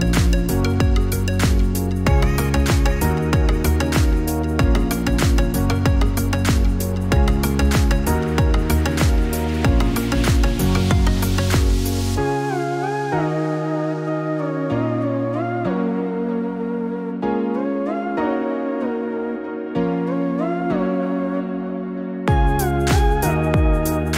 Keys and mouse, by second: 0.0-1.3 typing, 5.3 KP_6, 5.8 KP_6, 6.6 KP_6, 7.0 KP_6, 10.5-12.7 typing, 13.9 KP_6, 19.4-22.5 drag.